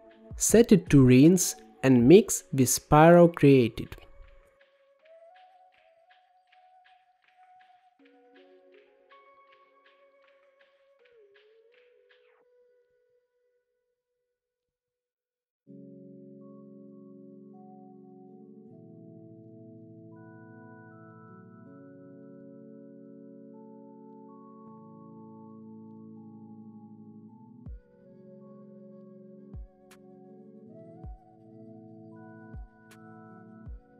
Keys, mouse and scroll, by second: 0.3-3.4 drag, 4.4-6.2 drag, 6.2-7.3 middle drag, 8.0-8.3 scroll down 4, 8.3-9.5 middle drag, 9.5 click, 10.2 shift+d, 12.6-14.7 drag, 14.7 middle click, 15.6 click, 15.7 g, 17.8 middle click, 18.6 shift+a, 21.2 middle click, 22.1 scroll up 2, 23.1-24.4 drag, 25.8-27.3 middle drag, 27.3-27.7 scroll up 2, 28.0-28.5 scroll down 5, 28.5 middle click, 29.2-30.6 scroll up 13, 30.6 middle click, 31.3-33.9 drag.